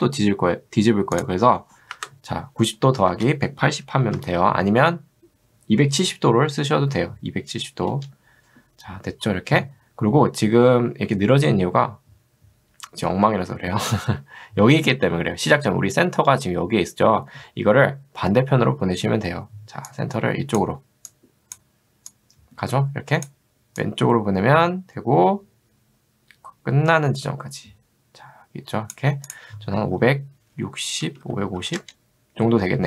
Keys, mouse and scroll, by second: 1.2 click, 3.1-4.6 typing, 7.9 Return, 19.9 click, 22.6 click, 23.9-29.0 drag, 30.0 5, 31.1 BackSpace, 31.6 0, 31.8 Return.